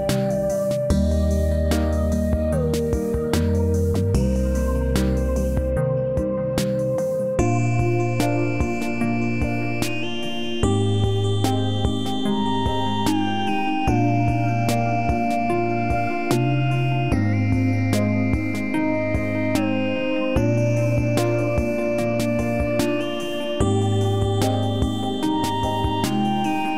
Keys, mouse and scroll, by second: 0.2-2.4 alt+right drag, 2.4 click, 8.4 space, 8.4 click, 9.2-10.1 alt+right drag, 11.6 click, 13.9-14.5 alt+click, 15.2 w, 16.6-17.2 alt+click, 18.7-21.7 drag, 22.5 e, 23.6-25.4 drag.